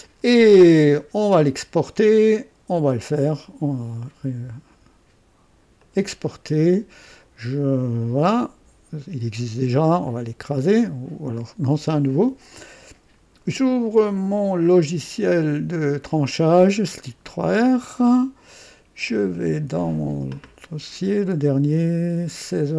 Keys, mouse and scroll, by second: 1.2 click, 2.3 click, 5.8 click, 10.0 click, 15.0 click, 16.4 click, 19.0 click.